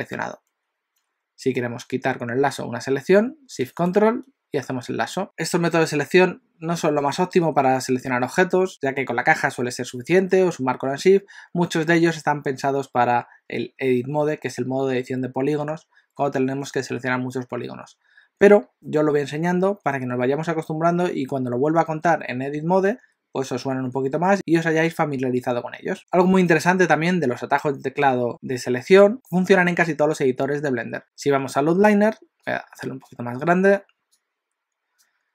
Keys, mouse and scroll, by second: 4.0 ctrl+shift+right click, 34.2 click.